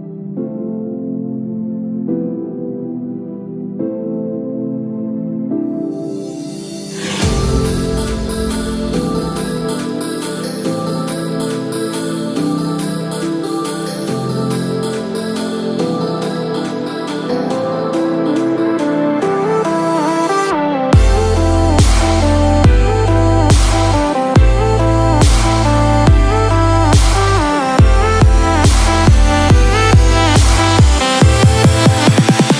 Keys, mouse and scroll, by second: 29.0 click, 30.7 click, 31.6 click, 32.4 click.